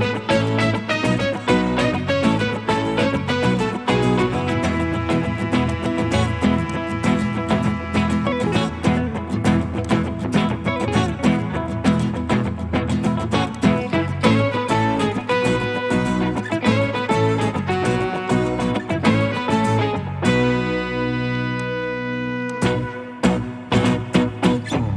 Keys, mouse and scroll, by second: 0.8 middle click, 2.2 scroll up 1, 2.2 middle click, 4.3 right click, 14.3 middle click, 20.2 right click.